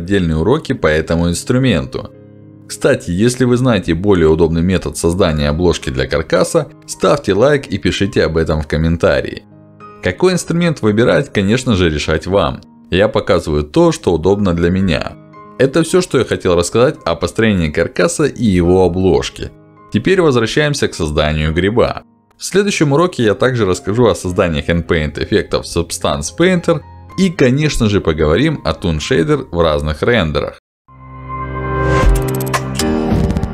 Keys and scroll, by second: 4.5 w, 9.7 q.